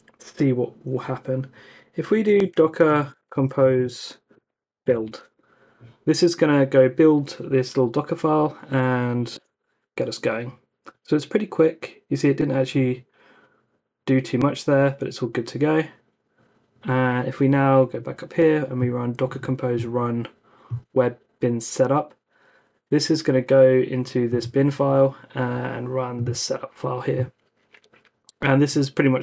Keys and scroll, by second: 1.8-5.3 typing, 9.3 Return.